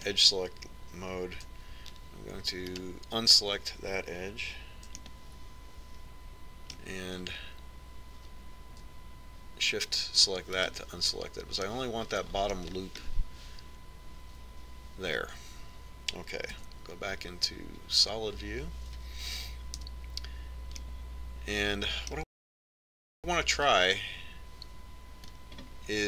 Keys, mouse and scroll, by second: 4.6-6.4 right drag, 6.9-8.6 middle drag, 12.5-15.0 right drag, 15.0-16.8 middle drag, 18.5 z, 21.8 KP_1, 22.8-24.7 middle drag.